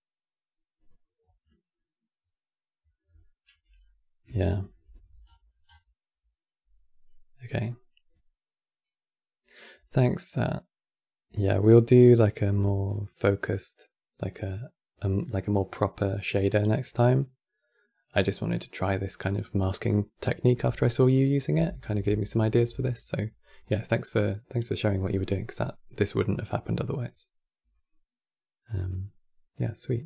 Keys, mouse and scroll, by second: 3.5-4.2 middle drag, 4.2 ctrl+s, 4.9-5.5 scroll down 11.